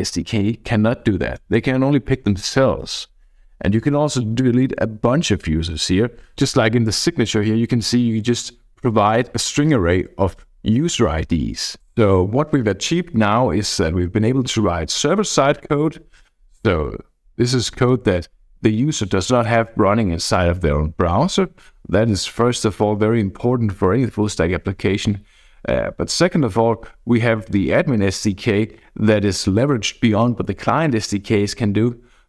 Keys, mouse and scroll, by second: 4.5 Up.